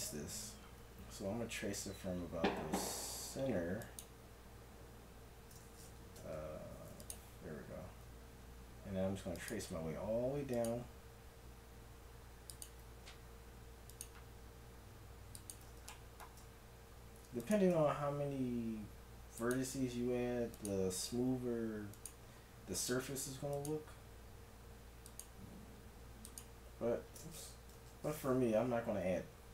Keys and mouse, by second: 3.8-5.5 drag, 6.2 ctrl+Tab, 12.3 middle click, 17.0-19.0 middle drag, 19.0-27.9 drag, 27.7 ctrl+z.